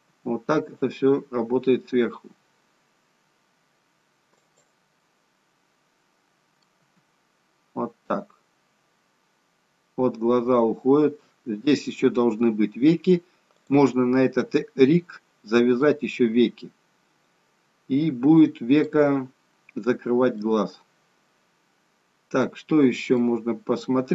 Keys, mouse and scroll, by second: 0.0 g, 4.9 middle click, 6.7 g, 14.4 middle click, 16.4 middle click, 20.3 middle click, 23.0 middle click.